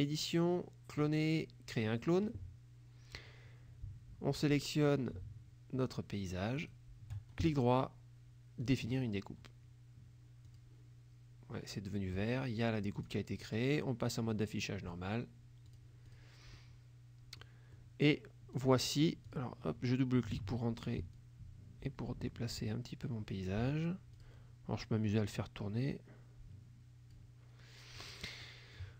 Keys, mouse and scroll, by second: 1.8 click, 6.6 shift+click, 7.4 shift+right click, 8.7 click, 10.5 click, 13.0 click, 13.5 click, 15.8 click, 16.2 click, 16.6-17.7 middle drag, 17.8 middle click, 18.6 click, 19.3 click, 20.4 ctrl+a, 21.2-24.1 drag, 24.3 click, 25.4-27.4 drag, 28.0 click, 28.5 click.